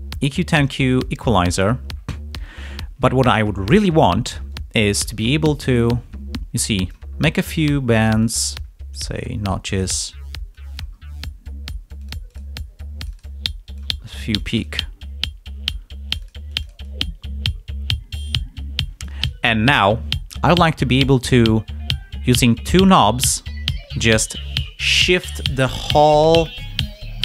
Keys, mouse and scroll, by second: 0.6 click, 4.9-7.0 drag, 7.0-7.4 scroll up 1, 7.5 scroll down 2, 8.2 click, 9.1-9.4 scroll up 1, 10.5 click, 10.9-11.2 scroll up 1, 11.9 click, 12.9-13.9 drag, 13.9 scroll up 1, 14.3 click, 16.0-19.2 drag.